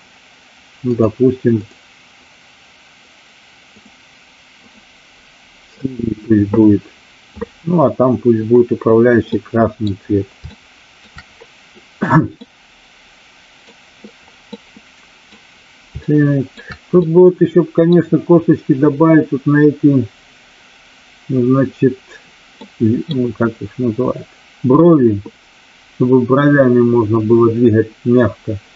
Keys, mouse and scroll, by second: 3.7 click, 4.5 click, 5.8 click, 9.3-9.7 middle drag, 10.4-11.0 shift+middle drag, 12.4-13.7 middle drag, 14.5-15.3 middle drag, 15.9-16.5 shift+middle drag, 16.9-17.9 middle drag, 22.5-23.0 middle drag.